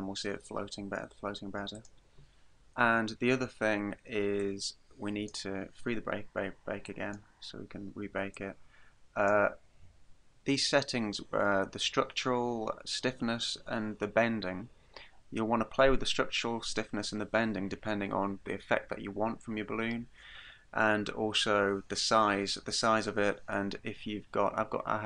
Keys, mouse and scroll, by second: 1.9 click, 4.4 click, 6.9 click, 8.4 click.